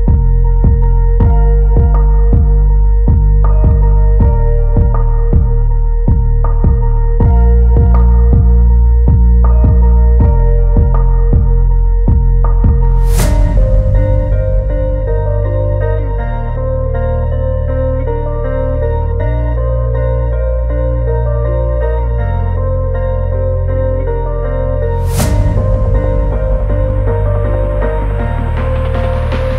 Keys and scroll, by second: 6.2 ctrl+=, 6.9 ctrl+=, 12.3 ctrl+shift+n, 13.2 Return, 23.0 [.